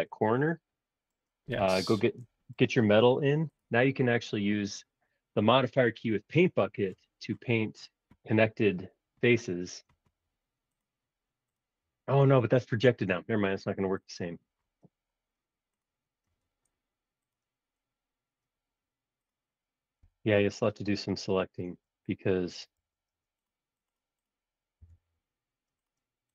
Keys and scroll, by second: 20.0 b, 21.7 super+z, 22.8 super+z, 23.1 space, 24.8 b.